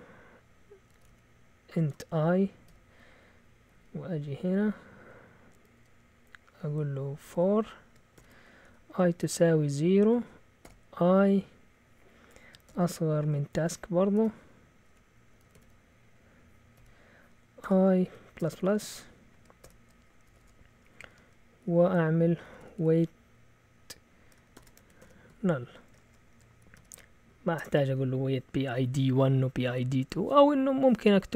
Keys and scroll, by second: 0.6-4.4 typing, 5.7 typing, 7.0-10.6 typing, 12.6 typing, 14.1 Delete, 14.8-20.1 typing, 20.3 Return, 20.4 Return, 20.8 Up, 21.1 Tab, 22.0-23.2 typing, 24.3-27.6 typing.